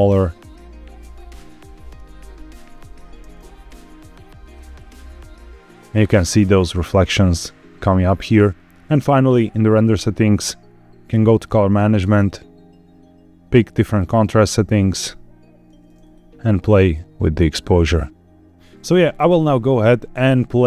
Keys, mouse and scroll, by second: 1.3 click, 1.8 KP_0, 2.5-3.0 scroll up 3, 3.0 space, 8.0-8.6 scroll down 3, 8.6 scroll up 1, 8.8 space, 9.1 click, 9.6-10.9 scroll down 4, 10.9 click, 11.2-12.0 scroll down 3, 12.0-15.0 drag, 16.0-18.5 drag, 18.5 scroll up 1, 18.5 space.